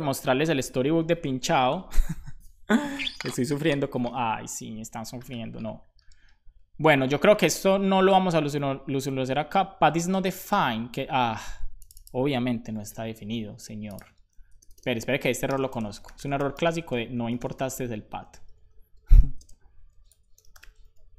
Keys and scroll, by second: 12.6 super+c, 14.3 super+Left, 14.5 Return, 15.0 Up, 15.3 c, 17.1-18.9 typing, 20.3 p, 20.8 super+s.